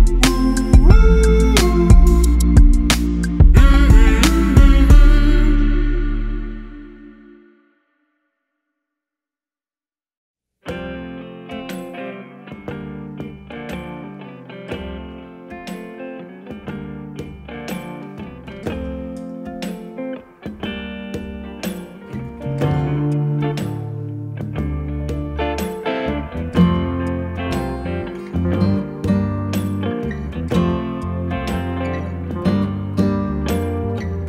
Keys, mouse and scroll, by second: 0.8 Left, 1.9 Up, 4.4 Left, 7.0 click, 10.2 click, 13.5 click, 17.1 click, 23.9 a, 24.8 click, 28.0 click, 31.2 click, 32.9 z, 33.8 click.